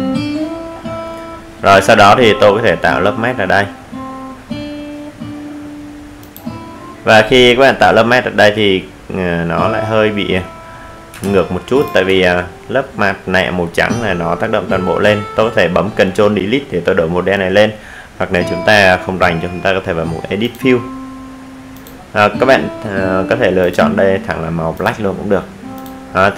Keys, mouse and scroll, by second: 0.0 ctrl+space, 6.5 click, 14.2 z, 15.4 click.